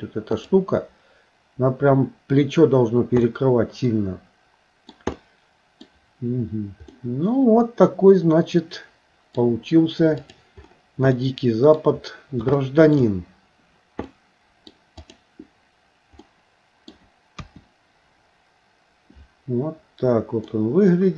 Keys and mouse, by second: 0.4 click, 3.3-4.9 middle drag, 5.2 middle click, 6.9-9.4 middle drag, 10.2 click, 11.2 middle click, 12.6 shift+middle click, 14.1 middle click, 16.2 middle click, 17.4 KP_1, 20.5-21.1 middle drag.